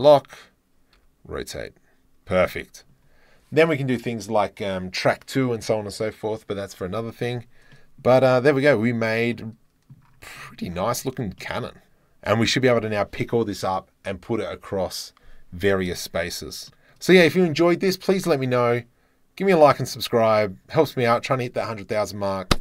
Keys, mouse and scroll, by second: 0.9 r, 1.0-2.5 drag, 7.7 drag, 8.3-8.7 drag, 9.3 click, 9.4 middle drag, 9.7 middle click, 10.4 middle click, 11.0 click, 11.3 click, 11.5 right click, 16.6 shift+middle click.